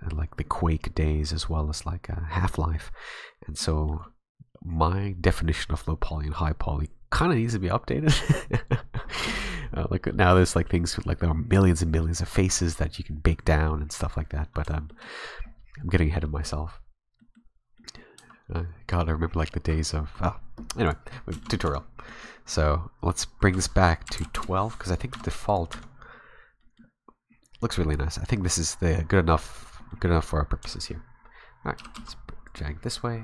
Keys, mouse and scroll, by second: 3.7 shift+middle click, 14.7 shift+middle click, 16.2 middle click, 17.2 middle click, 18.2 Tab, 18.2 middle click, 20.9 right click, 21.4 shift+middle click, 21.7 Tab, 22.1 middle click, 23.5 click, 24.4 s, 24.9 right click, 25.1 Tab, 25.5 right click, 25.7 Tab, 26.6 middle click, 27.6 middle click, 28.0 scroll up 1, 28.4 middle click, 29.8 middle click, 30.6 Tab, 31.4-31.9 scroll down 3, 31.8 g, 32.9 right click, 33.1 scroll up 5.